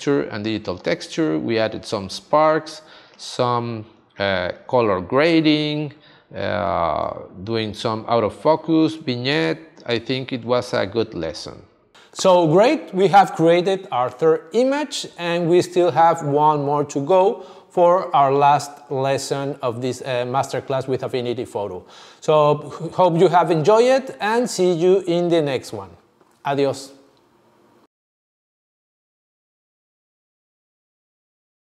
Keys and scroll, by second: 2.6 space.